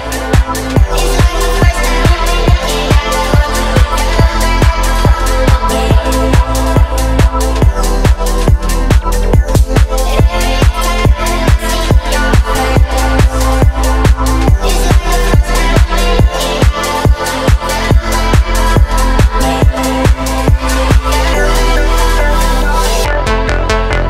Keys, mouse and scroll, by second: 0.2-1.1 middle drag, 2.0 shift+middle drag, 2.4 Tab, 3.2 a, 4.2 p, 5.7 Tab, 6.4 click, 6.7 click, 7.2 click, 7.6 middle drag, 7.9-8.3 scroll up 2, 8.3 shift+middle drag, 10.0-11.4 drag, 11.9-12.7 scroll up 1, 13.3 click, 15.2-16.5 drag, 18.0 shift+click, 18.7 shift+click, 20.0-20.7 drag, 21.2 click, 22.3 click, 23.1 click.